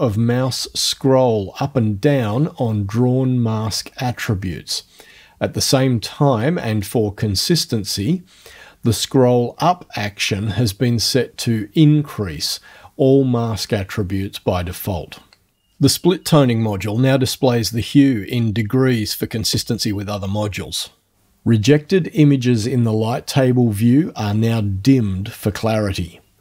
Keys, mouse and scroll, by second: 0.2 click, 6.8 click, 10.3 click, 13.4-14.4 scroll down 4, 14.4 scroll down 1, 16.9 scroll down 2, 22.8 alt+F12.